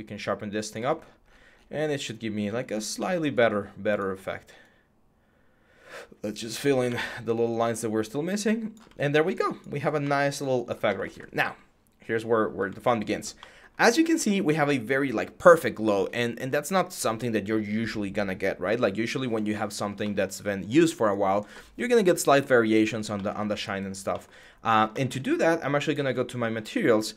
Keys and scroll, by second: 6.6 ctrl+z.